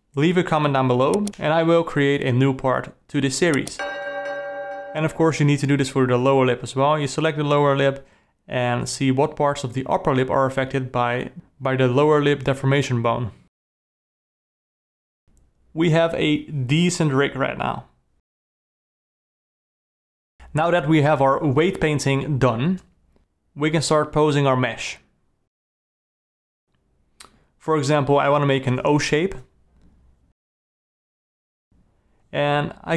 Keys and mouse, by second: 0.8 alt+a, 1.2 shift+click, 2.1 shift+click, 2.7 g, 4.0 alt+a, 4.4 shift+click, 6.1 g, 12.2 alt+a, 14.1 click, 14.7 click, 15.0 click, 15.3 click, 15.5 click, 15.8 click, 16.1 click, 16.6 click, 17.3 click, 17.8 click, 18.1 click, 18.5 click, 18.9 click, 20.3 Tab, 20.3 alt+a, 20.5 Tab, 20.8 click, 20.9 g, 22.0 click, 22.1-26.3 typing, 23.3 click, 24.9 click, 26.3 alt+a, 26.8 alt+a, 27.2 ctrl+c, 27.7 ctrl+shift+v, 28.0-29.7 typing, 30.2 shift+click, 30.8 alt+a.